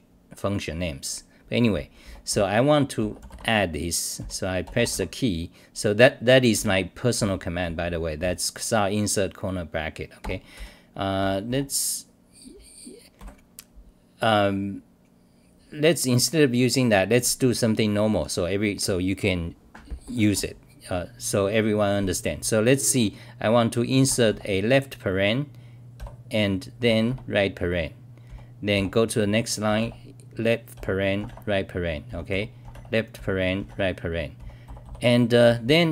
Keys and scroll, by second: 1.8-2.8 typing, 4.2 t, 6.5 w, 11.2 f, 25.9 r, 28.2 t, 28.7 g, 30.7 r, 31.8-35.9 typing.